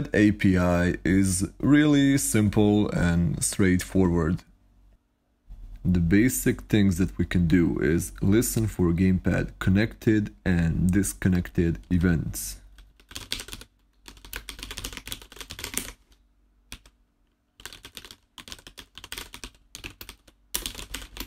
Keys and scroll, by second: 11.8-15.4 typing, 16.5-21.2 typing.